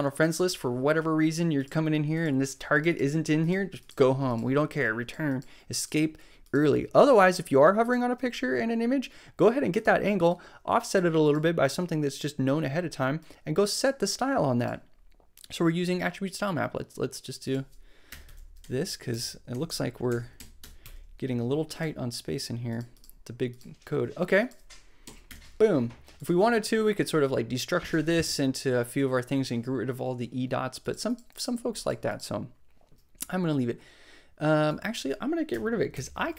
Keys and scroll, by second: 18.1 Return, 18.6 Up, 19.1 Left, 20.0 alt+Left, 20.6 Return, 20.8 Tab, 25.0 super+Right, 25.2 super+Return, 26.2 Return, 35.5 BackSpace, 35.9 shift+9.